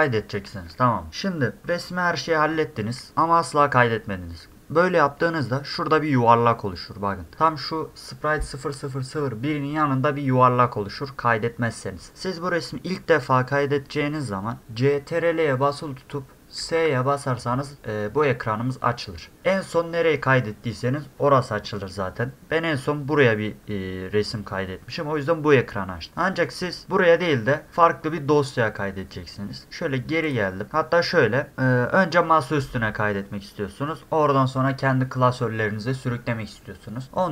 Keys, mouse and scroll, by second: 16.6 ctrl+s, 30.2 click.